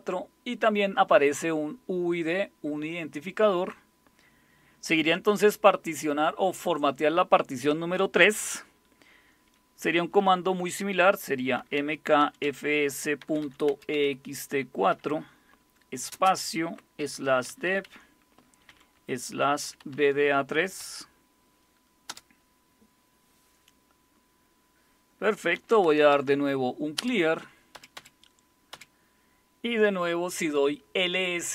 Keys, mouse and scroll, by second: 11.6-14.9 typing, 16.1-20.8 typing, 22.1 typing, 25.3-26.6 typing, 27.0 Return, 27.7 Up, 28.0 Up, 28.7 Up.